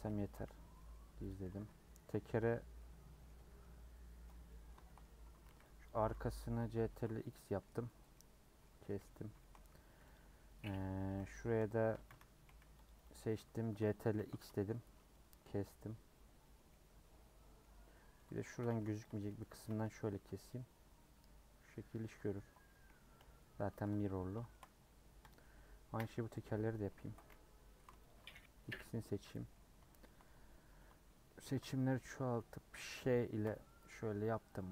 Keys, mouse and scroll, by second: 0.2 Tab, 0.4 h, 0.7 middle click, 1.0 scroll up 1, 1.2 click, 1.5 Tab, 2.4 /, 2.8 middle click, 3.3 3, 3.6-4.7 middle drag, 4.7 scroll up 1, 4.8 shift+middle click, 5.2-5.6 scroll up 1, 5.6 c, 6.8 ctrl+x, 7.2 middle click, 8.1-10.1 middle drag, 10.1 click, 11.0 a, 11.4 a, 11.8 a, 12.7 c, 14.1 ctrl+x, 15.1-17.8 middle drag, 17.8 scroll up 1, 17.9 middle click, 18.6 2, 19.0 alt+Left, 19.5 a, 20.5 u, 21.6 middle click, 22.3-23.1 scroll down 2, 23.1 /, 23.8 Tab, 24.0 h, 24.5 shift+middle click, 25.3 click, 25.8 KP_Decimal, 26.4 Tab, 26.8 Tab, 28.0 shift+click, 28.7 /, 29.1 Tab, 29.2 middle click, 30.2-30.6 scroll up 3, 31.4 ctrl+KP_Add, 33.4 ;, 34.1 middle click.